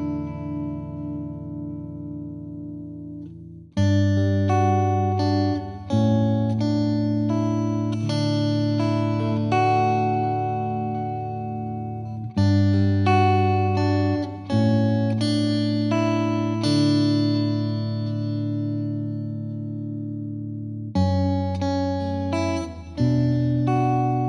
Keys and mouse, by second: 1.0-2.1 drag, 2.8 Delete, 3.9 click, 4.6 click, 10.6 click, 10.9 ctrl+u, 12.4 click, 13.6 click, 14.7 click, 18.8 Delete, 21.2 click, 22.7 click.